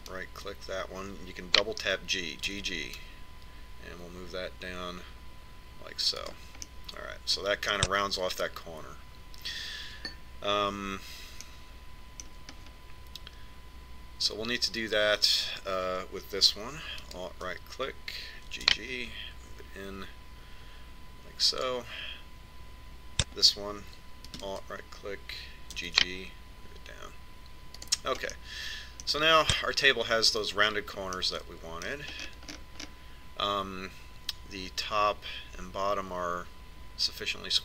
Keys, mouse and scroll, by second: 0.1 a, 1.5 right click, 4.0 g, 8.2-10.1 middle drag, 13.0-15.9 middle drag, 18.6 right click, 20.1 g, 25.9 right click, 27.4 g, 30.0-32.6 middle drag, 32.8-34.4 middle drag.